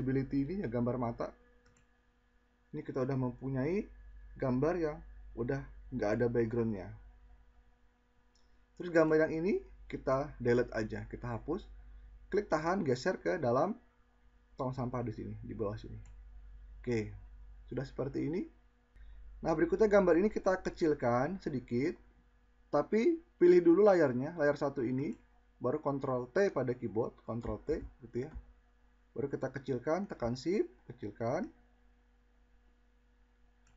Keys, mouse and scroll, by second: 25.8 ctrl+t, 31.3 click.